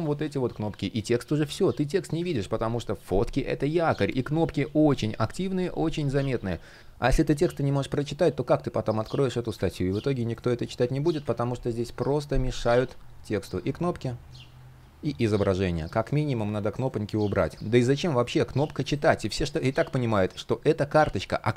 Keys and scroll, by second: 1.9 super+z, 10.5 super+z.